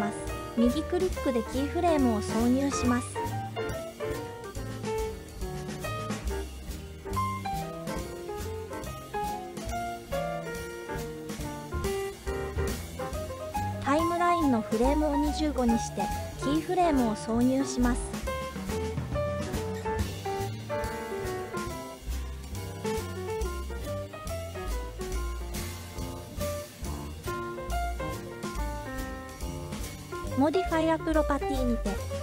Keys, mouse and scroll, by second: 0.4-2.2 right drag, 5.0-6.0 drag, 7.1-8.7 drag, 10.2 Left, 10.4 Left, 14.4-15.7 drag, 17.0-18.6 right drag, 20.7-22.1 drag, 22.6-23.5 middle drag, 24.6-25.9 drag, 27.3 click, 30.2 click.